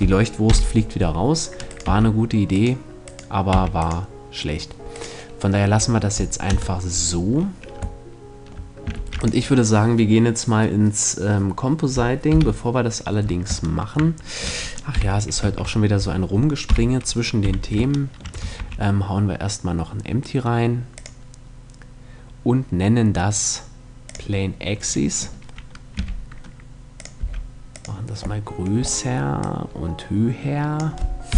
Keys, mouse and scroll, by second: 0.0 F11, 0.0-1.1 drag, 1.2-4.2 right drag, 1.4 x, 3.0 x, 5.2 a, 6.0 KP_0, 8.5 ctrl+s, 11.8 KP_7, 14.5 KP_5, 15.0 shift+a, 16.2 KP_5, 16.9 z, 18.1 shift+a, 24.4-26.5 middle drag, 25.5 g, 26.7-30.7 drag, 26.7 s, 27.9-29.0 middle drag, 30.8 KP_1.